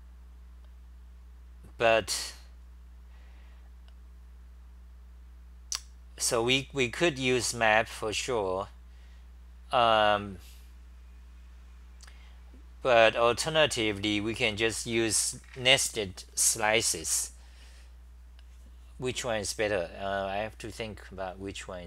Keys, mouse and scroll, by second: 2.1-5.1 scroll down 4, 2.1 2, 15.2 c, 15.6 c.